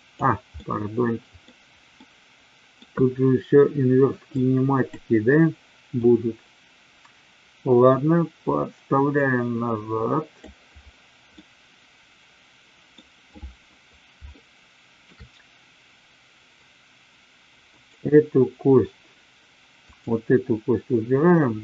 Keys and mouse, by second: 0.5-1.4 middle drag, 1.9-2.8 middle drag, 4.3 click, 6.0-10.4 drag, 11.3-12.9 middle drag, 14.1-15.0 shift+middle drag, 17.7-18.7 drag, 19.9 click.